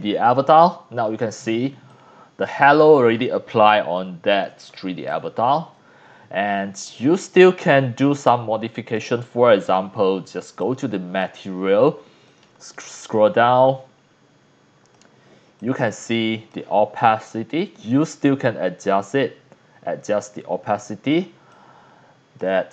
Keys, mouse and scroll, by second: 1.4 scroll down 2, 1.9 click, 1.9 x, 2.7 c, 2.8-4.4 drag, 4.7 scroll down 2, 5.0 c, 5.1-6.8 drag, 7.3-8.9 drag, 9.6 click, 10.6 click, 12.3-14.9 drag, 15.6-16.5 drag, 17.6-21.1 drag, 21.5 click, 21.8 click.